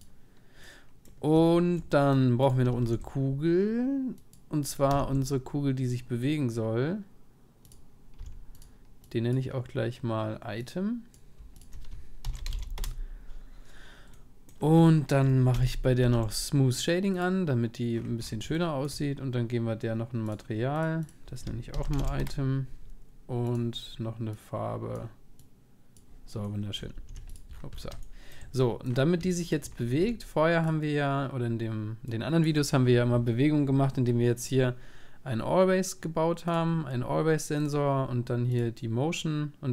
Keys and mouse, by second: 0.0 ctrl+s, 0.0-1.8 drag, 0.6-4.9 middle drag, 2.8-4.9 right drag, 2.8 shift+s, 4.9 shift+a, 8.2 s, 9.0-14.1 drag, 14.1-16.0 middle drag, 15.6 n, 16.0 n, 16.2 middle click, 16.2 t, 17.2-19.0 drag, 19.0-21.1 middle drag, 21.1-22.8 drag, 23.7-25.4 drag, 26.4-28.8 middle drag, 26.9 ctrl+s, 28.9 middle click, 29.1 middle click, 29.4 middle click, 29.7 middle click, 30.0 s, 32.0 click, 32.2-33.8 drag, 34.4 click, 34.6 click, 36.4 click, 37.6-39.3 drag.